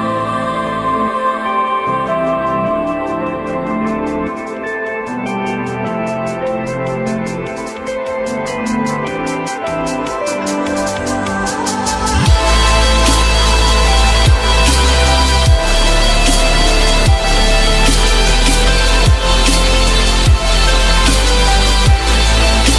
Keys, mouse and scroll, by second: 1.8 alt+middle click, 3.5 alt+middle click, 11.6 alt+middle click, 14.1 shift+click.